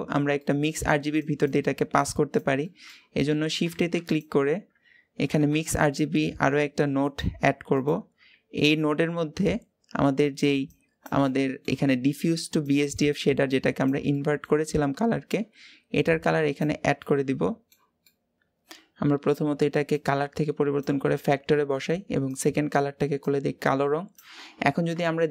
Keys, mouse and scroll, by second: 9.3 scroll up 3, 10.5-16.5 drag, 18.1 middle click, 18.4-21.3 drag, 21.3-23.0 middle drag, 23.0 click, 24.9-25.3 shift+middle drag.